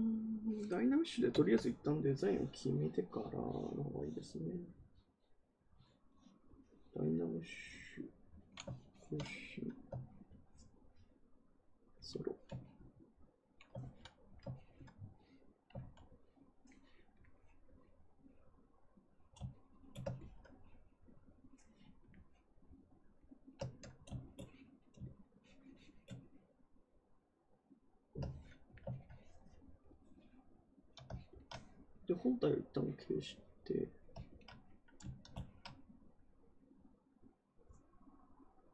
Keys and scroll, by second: 13.7 ctrl+z, 15.7 ctrl+z.